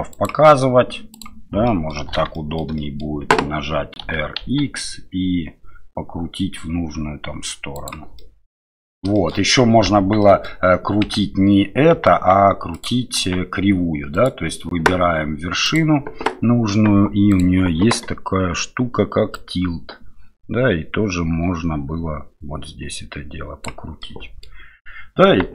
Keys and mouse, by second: 1.2 click, 1.7 middle click, 2.3 shift+middle click, 2.8 middle click, 4.0 r, 8.2 middle click, 9.1 shift+middle click, 10.0 Tab, 10.2 middle drag, 11.2 Tab, 11.9 Tab, 13.2 Tab, 14.1 click, 15.6 click, 24.0 middle click.